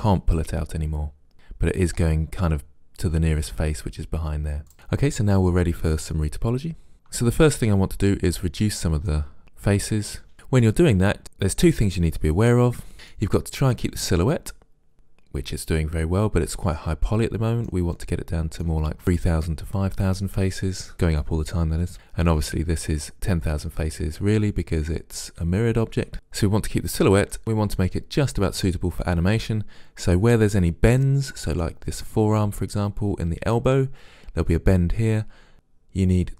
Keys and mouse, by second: 8.3-9.4 middle drag, 10.7 middle click, 12.8 middle click, 14.6 middle click, 17.1-19.0 middle drag, 21.9 a, 26.0 a, 26.1-27.4 middle drag, 31.1-33.0 middle drag.